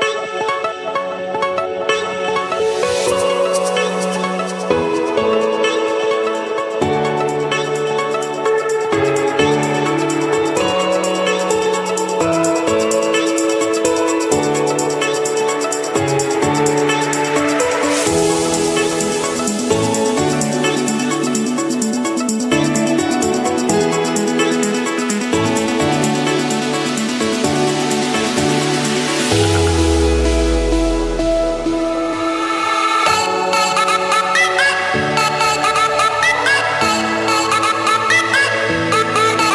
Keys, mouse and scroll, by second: 0.4 click, 2.4 click, 2.8-3.4 scroll, 3.4 Escape, 4.2-5.7 typing, 5.9 Return, 6.7 click, 7.6 click, 7.9 Return, 9.3-10.2 scroll, 10.2-10.6 scroll, 11.3 Escape, 12.9 click, 14.2 click, 15.5 click, 17.6 click, 18.2 click, 19.5 click, 20.3 click, 20.6-21.2 scroll, 21.2 Escape, 21.9 click, 22.5 right click, 23.6 click, 24.4 click, 25.3 click, 25.9 middle click, 27.0 click, 29.0 click, 31.1 click, 32.6-34.4 scroll, 34.4 click, 35.0-35.6 scroll, 35.8 Escape, 37.7-39.3 typing.